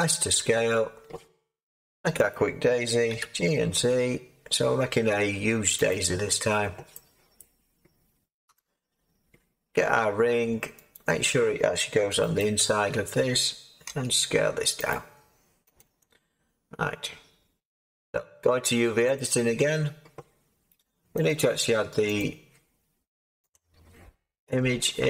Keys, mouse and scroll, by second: 3.1 g, 3.7 z, 8.4 7, 13.8 g, 13.8 s.